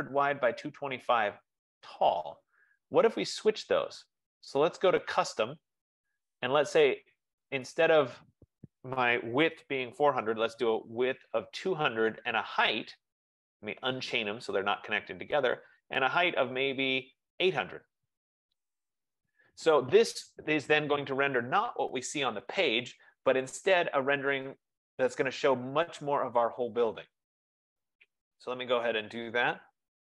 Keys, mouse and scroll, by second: 3.4 click, 5.5 click, 8.2 click, 9.8 typing, 12.2 click, 13.2 click, 14.4 click, 15.6 click, 17.9 click, 18.3-18.7 typing, 19.2 Tab, 24.6-29.6 drag.